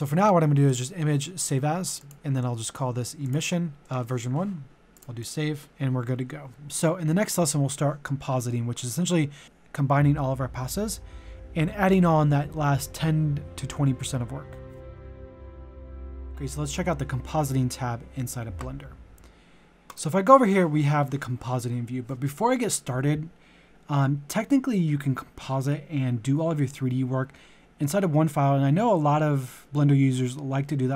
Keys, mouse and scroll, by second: 4.9 click, 18.3 click.